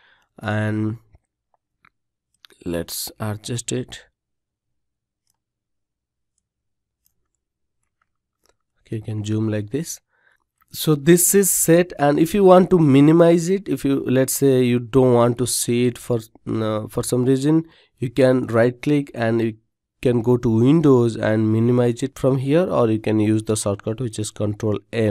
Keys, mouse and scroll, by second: 22.3 ctrl+m.